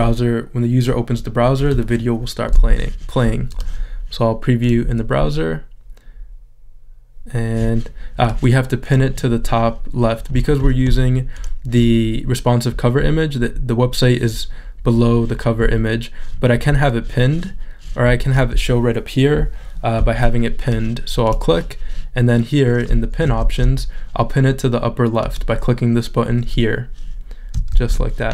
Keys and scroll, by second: 23.5 shift+super+z, 27.7 shift+super+z.